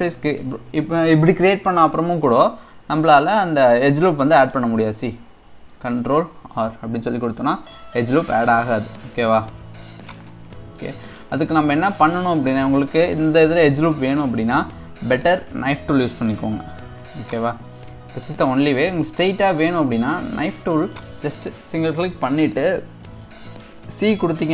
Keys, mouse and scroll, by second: 2.9 scroll down 2, 4.0-6.3 middle drag, 6.3 ctrl+r, 10.5 scroll up 2, 10.8-12.5 middle drag, 12.5 KP_1, 15.1 k, 22.5-23.0 scroll up 2, 23.0-24.5 middle drag.